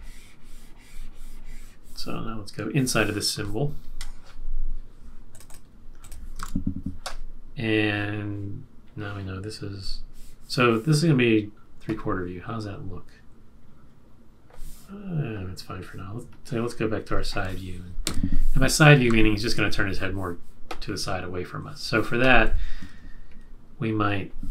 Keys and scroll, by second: 6.3 super+s, 18.0 F6, 19.2 super+=, 22.4 q.